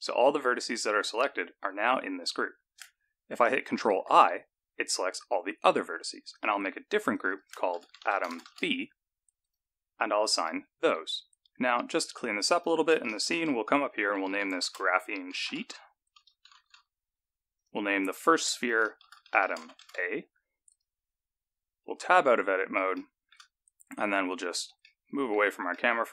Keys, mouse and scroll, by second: 3.7 ctrl+i, 6.3 click, 7.1 click, 7.3 click, 10.3 click, 12.2 click, 12.5 click, 16.6 e, 18.0 click, 18.4 click, 18.6 click, 22.4 Tab, 23.1 shift+middle click, 23.6-24.9 scroll down 1, 24.9 scroll down 4, 25.0 middle click, 25.9 shift+middle click.